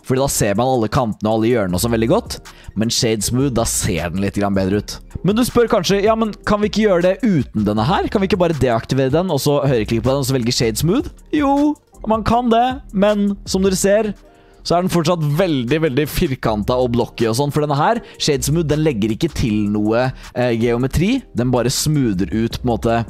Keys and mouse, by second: 0.0 click, 7.8 click, 11.2 middle click, 12.4 middle drag, 13.1-13.8 middle drag, 14.1-14.8 drag, 14.8-15.5 middle drag, 15.5-16.1 drag, 16.4-16.7 drag, 17.1 drag, 19.9-20.2 drag, 21.3 click, 22.3-22.7 drag.